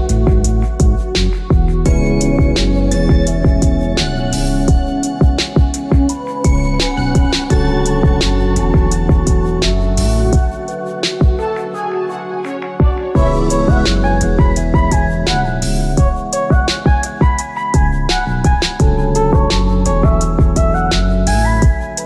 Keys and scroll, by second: 9.7 ctrl+alt+shift+e.